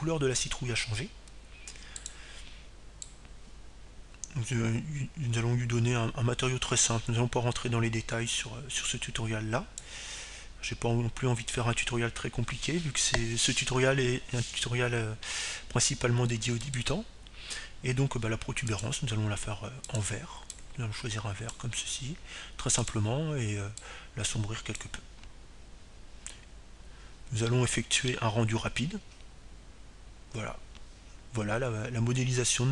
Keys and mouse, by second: 5.3-7.0 drag, 20.0-21.7 right drag, 22.2-25.5 drag, 26.2-28.7 drag, 31.0 middle click, 31.1-32.7 drag.